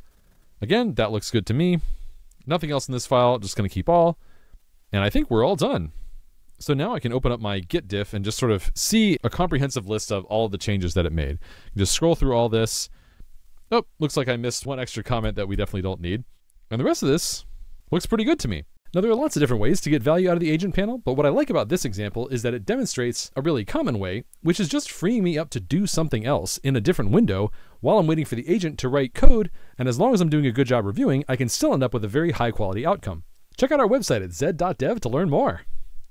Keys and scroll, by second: 6.7 ctrl+shift+g, 9.1 super+r, 15.0 super+BackSpace, 15.6 super+s.